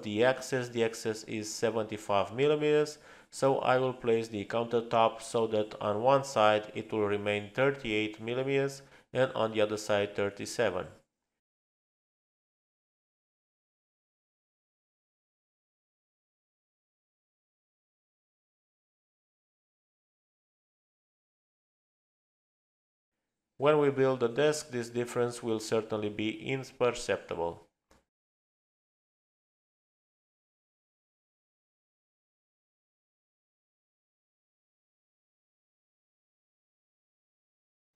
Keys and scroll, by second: 4.7 space, 15.0 Left, 15.0 Return, 15.8 space, 28.1 space, 32.4 t.